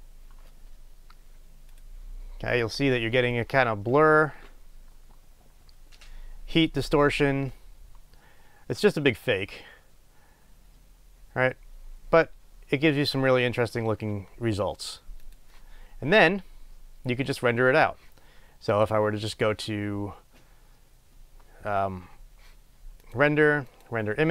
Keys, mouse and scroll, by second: 2.0 click, 15.5 click.